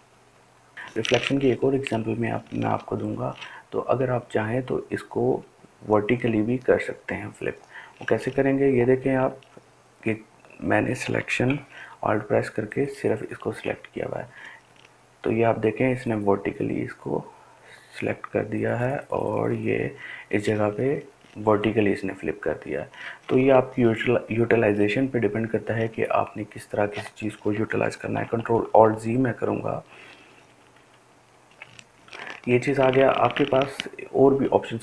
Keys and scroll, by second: 29.8 ctrl+alt+z, 30.2 ctrl+alt+z, 30.9 ctrl+alt+z, 31.3 ctrl+alt+z, 31.5 ctrl+alt+z.